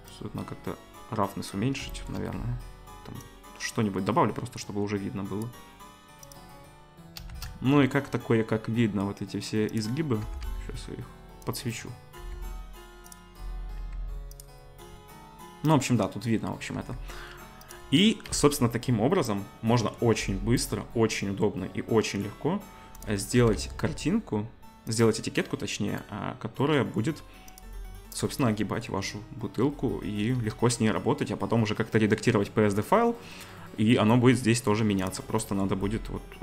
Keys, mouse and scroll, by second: 0.1-1.8 drag, 1.8 shift+right click, 1.8 shift+click, 1.9 shift+right drag, 2.1 shift+drag, 2.2 right click, 2.4-6.3 drag, 6.3-22.9 middle drag, 7.3 shift+a, 10.2 g, 12.2 g, 13.8 g, 16.7 g, 18.3 Delete, 22.9 click, 23.0-36.4 middle drag, 23.4 g, 30.3 KP_0.